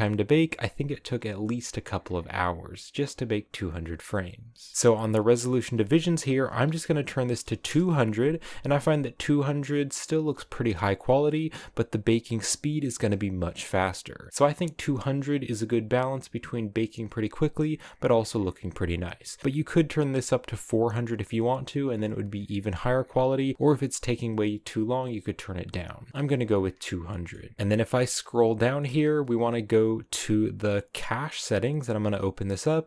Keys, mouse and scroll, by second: 7.7 0, 26.2-32.8 shift+middle drag.